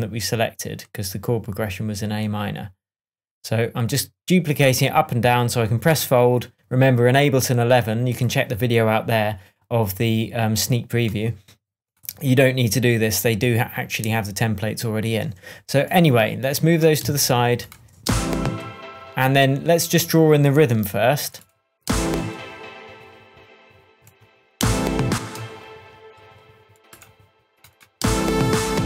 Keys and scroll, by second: 17.0 Left, 18.8 space, 21.8 space, 24.6 space, 28.0 space.